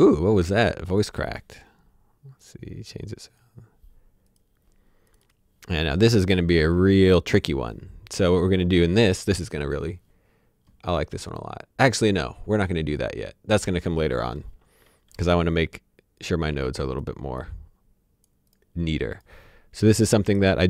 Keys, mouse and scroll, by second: 0.9 click, 15.8 click.